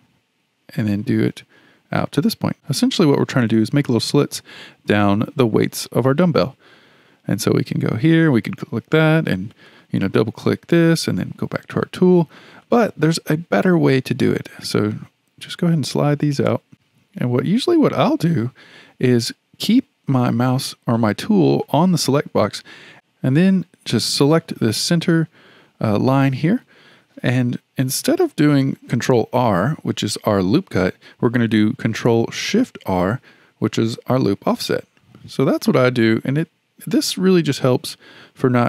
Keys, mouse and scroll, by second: 8.1-9.6 drag, 9.7 click, 11.7-15.7 drag, 21.7-22.9 drag, 24.2 click, 24.5 click, 32.9 ctrl+shift+r.